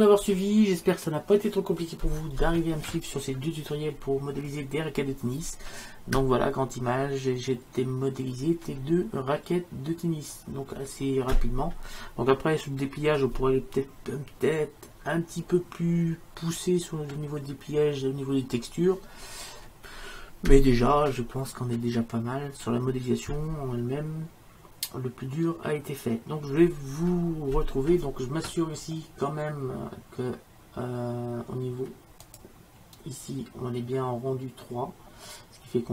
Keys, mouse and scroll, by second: 32.3-34.1 drag.